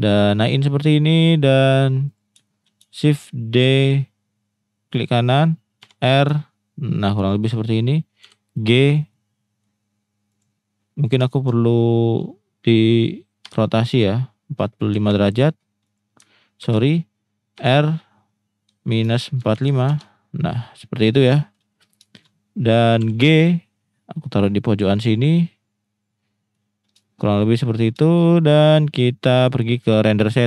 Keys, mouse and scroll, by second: 2.0 click, 2.5 shift+middle drag, 3.6 shift+d, 4.9 right click, 5.8 r, 7.1 ctrl+drag, 8.2 g, 8.8-9.2 drag, 9.2-9.7 middle drag, 11.4 shift+middle click, 13.4 r, 14.9 4, 15.8 click, 16.6 ctrl+z, 17.5 r, 19.0 -, 19.4 4, 19.8 Return, 21.5 shift+middle drag, 22.2 shift+middle click, 23.0 g, 24.9 click, 26.0-26.5 middle drag, 27.1 shift+middle click, 27.5 middle click, 28.1 shift+middle click, 28.4 click.